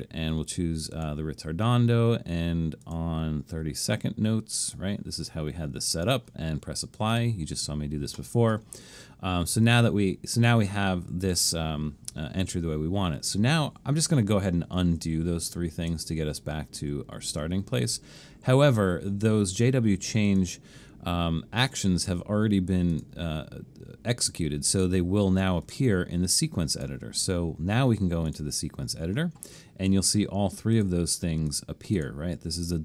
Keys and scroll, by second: 15.0 super+z, 15.9 super+z.